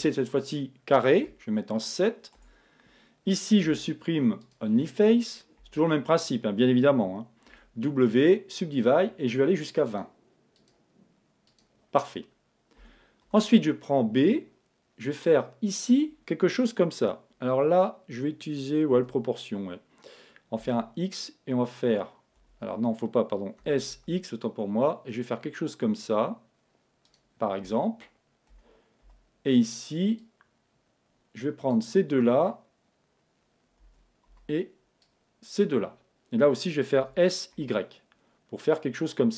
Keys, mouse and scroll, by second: 2.4 Tab, 3.6 x, 5.6 a, 7.5 w, 9.9-13.1 drag, 12.8 a, 13.2 b, 18.9 g, 23.6 s, 27.1-28.8 drag, 28.5 a, 29.1 b, 33.9 Escape, 34.3 b, 37.0 s.